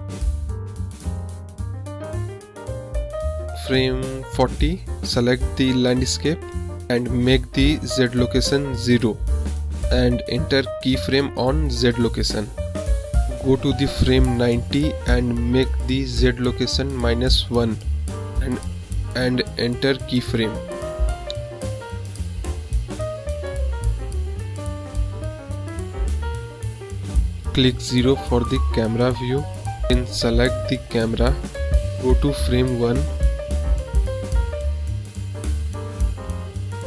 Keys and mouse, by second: 1.7-3.3 drag, 5.4 click, 5.8 click, 6.8 click, 7.9 middle drag, 16.3 click, 17.3 click, 17.7 click, 20.2-21.8 drag, 22.2 click, 28.7 KP_0, 30.7 click, 32.5 click.